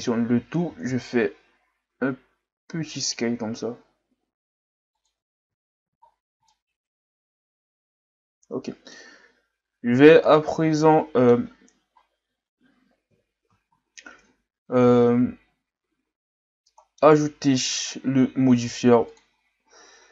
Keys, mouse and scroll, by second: 0.6 s, 5.4 Tab, 5.8 a, 6.1-6.5 scroll down 4, 6.5-9.5 middle drag, 10.2-11.9 middle drag, 11.9-12.4 ctrl+scroll up 3, 13.1 KP_3, 13.7-15.0 scroll up 6, 15.0-16.4 scroll up 1, 16.4-16.7 scroll up 1, 16.7-17.1 middle drag, 17.1-17.5 scroll up 2, 17.5 right click, 19.1 click.